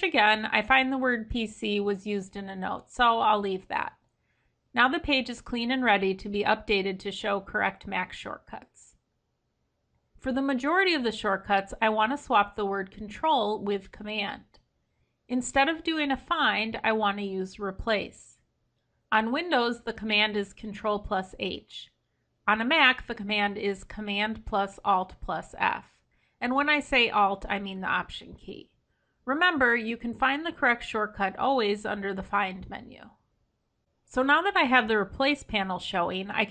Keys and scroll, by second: 10.8 ctrl+Home, 21.6 ctrl+h.